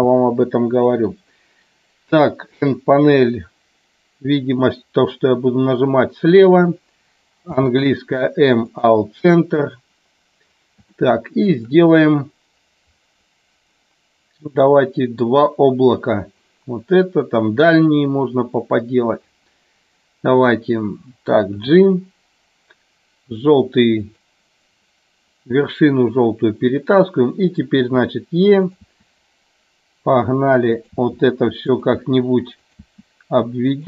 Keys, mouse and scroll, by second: 7.5 m, 11.1 shift+middle click, 21.7 g, 24.1 click, 28.0 e, 28.7 click, 28.9 e, 30.8 click, 31.0 e, 31.8 click, 32.0 e, 32.7 click, 32.9 e, 33.7 click.